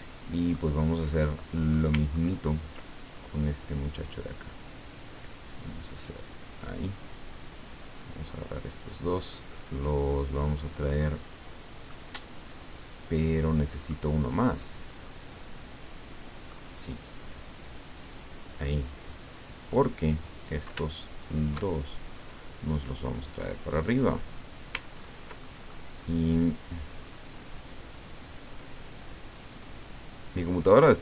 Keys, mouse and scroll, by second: 1.1 middle click, 2.1-2.6 ctrl+scroll up 2, 3.9 click, 4.7 click, 6.0 click, 7.8 click, 11.9-14.1 middle drag, 15.0-17.0 middle drag, 17.9 click, 19.8 click, 21.3 shift+click, 22.1-24.9 drag, 25.0-25.3 ctrl+scroll up 2, 25.4 ctrl+middle click, 25.7 ctrl+scroll up 2, 29.4 click, 30.0-31.0 drag.